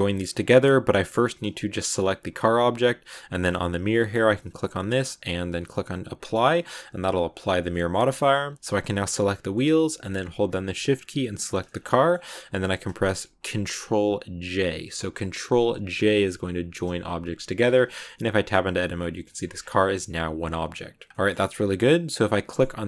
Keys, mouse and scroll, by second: 0.1 right click, 0.4-4.0 middle drag, 4.4-6.3 drag, 6.3 scroll up 1, 6.4 middle click, 6.6 Tab, 7.6 middle click, 8.2 Tab, 8.5-11.3 middle drag, 11.3 shift+right click, 11.5 shift+scroll down 1, 11.5 scroll up 1, 11.6 scroll down 2, 11.7-14.4 middle drag, 14.4 ctrl+j, 14.7 ctrl+scroll up 1, 15.9 middle click, 16.8 Tab, 17.8 a, 17.9-19.3 middle drag, 19.3 Tab, 19.4 scroll down 2, 19.7 g, 20.2 scroll down 2, 20.4 middle click, 21.2 scroll up 2, 21.6 right click, 22.3-22.8 middle drag.